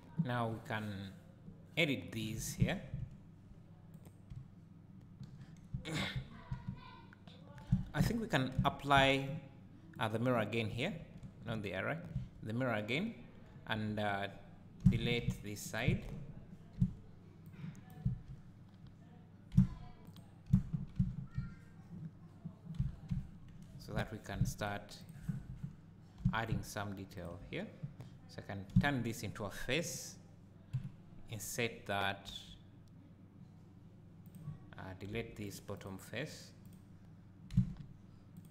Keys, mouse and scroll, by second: 2.6 2, 3.9 click, 4.3 `, 5.7 Tab, 7.7 Tab, 8.5 Tab, 9.9-12.1 drag, 11.2 ctrl+z, 12.1 Tab, 13.7 KP_7, 14.4 click, 14.9 z, 15.2 1, 15.9 alt+a, 15.9 click, 16.7 b, 18.0 z, 18.3-24.7 drag, 19.5 x, 20.5 z, 22.8 Tab, 24.0 3, 24.1 2, 25.0 alt+click, 25.4 3, 26.2 2, 27.2 alt+click, 27.7-28.1 scroll down 1, 28.7 f, 30.8 KP_Decimal, 32.3 i, 34.3 click, 35.1 3, 35.5 click, 35.8 click, 36.3 click, 36.7 click, 37.5 x.